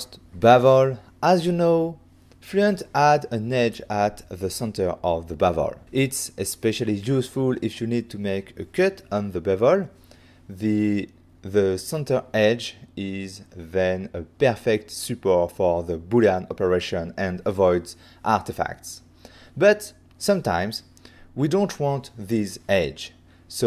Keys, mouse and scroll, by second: 1.3 shift+click, 2.6 click, 3.5 click, 4.9 click, 19.5 click.